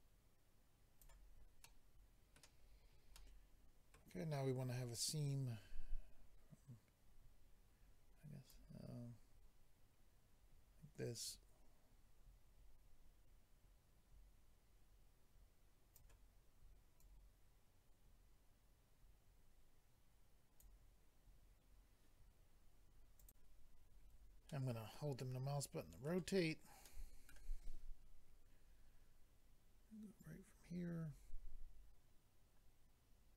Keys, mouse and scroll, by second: 1.6 middle click, 2.6-3.2 scroll down 2, 3.2 middle click, 8.5 click, 17.0 click, 23.2 click, 24.2 click, 24.5 middle click, 26.8 middle click, 30.2 click.